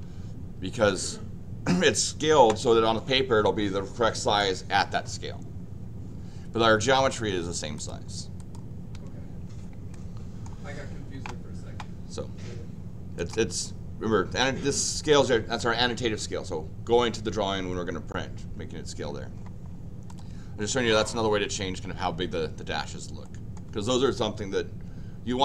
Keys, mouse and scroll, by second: 7.7 click, 8.4 click, 9.9 middle click, 13.1 click, 20.1 click, 23.2 middle click.